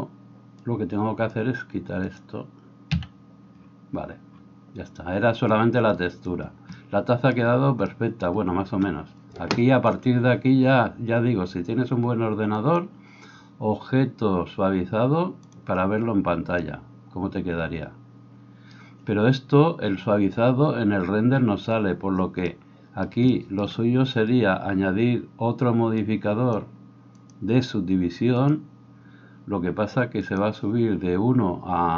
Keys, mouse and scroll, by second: 0.7 click, 1.0 middle click, 1.7-27.4 drag, 3.0 x, 27.4-28.6 middle drag, 28.6-31.9 drag.